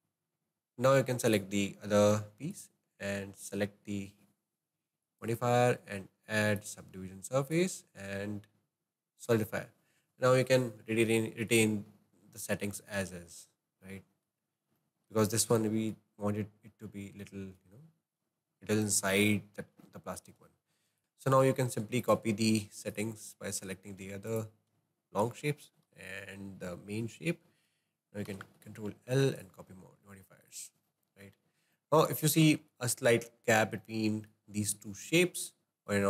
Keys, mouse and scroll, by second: 0.0-2.1 drag, 2.6 click, 5.1-10.9 drag, 11.5 click, 11.9-12.3 scroll up 5, 12.5-13.4 shift+middle drag, 13.4-13.9 scroll down 2, 13.9 middle click, 14.4-14.9 scroll down 3, 14.9-16.0 shift+middle drag, 16.0-16.3 scroll down 1, 16.3-17.1 scroll up 8, 17.1-19.3 shift+middle drag, 19.3-20.0 scroll down 2, 20.0-21.0 shift+middle drag, 21.0 click, 22.1 click, 23.0-23.7 shift+drag, 24.3 shift+drag, 28.2 ctrl+l, 30.5 click, 30.9-33.0 shift+middle drag, 33.0-33.7 scroll up 7, 33.9-36.0 shift+middle drag.